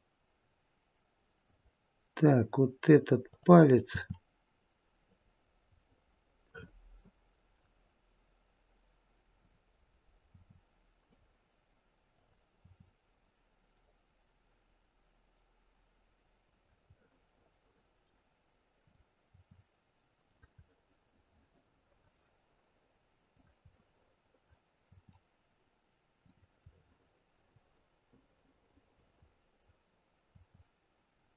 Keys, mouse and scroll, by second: 3.3 click, 3.9 r, 5.7 middle click, 9.3 click, 10.2 r, 12.0 click, 12.5 r, 16.8 middle click, 18.7 click, 19.3 r, 20.5 middle click, 23.2 click, 23.7 middle click, 24.7 r, 26.6 middle click, 30.1 r.